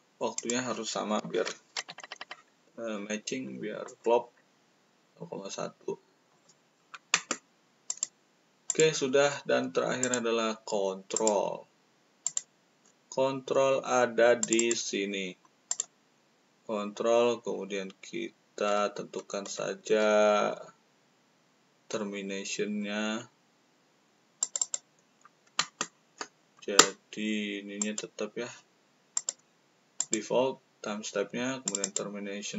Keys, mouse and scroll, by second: 0.3 click, 1.7 1, 3.8 click, 6.2 click, 7.8 click, 8.6 click, 10.0 click, 11.1 click, 12.2 click, 14.3 click, 15.6 click, 16.2-20.0 middle drag, 20.5 middle click, 24.4 click, 27.7 click, 29.1 click, 29.9 click, 31.6 click, 31.8 click.